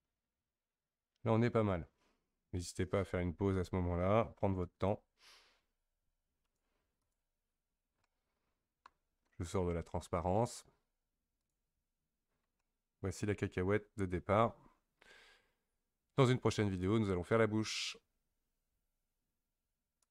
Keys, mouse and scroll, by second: 6.4-7.7 drag, 7.7-8.0 scroll down 2, 8.0-11.1 middle drag, 11.4 click, 12.2-12.6 scroll down 3, 12.6-15.7 middle drag.